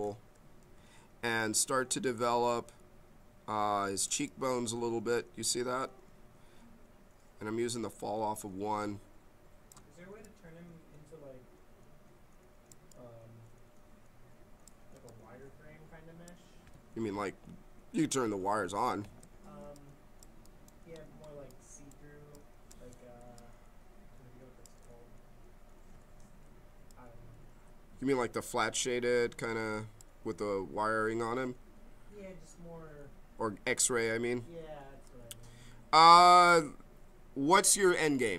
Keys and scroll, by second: 17.0 w, 18.8 w, 23.2 b, 26.4 m, 33.8 b, 36.3 m.